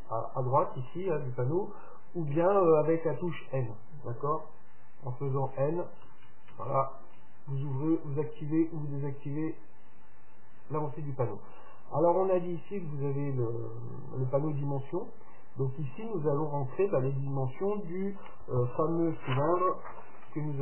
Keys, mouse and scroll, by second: 5.4-8.4 typing, 10.2 n, 10.9 n.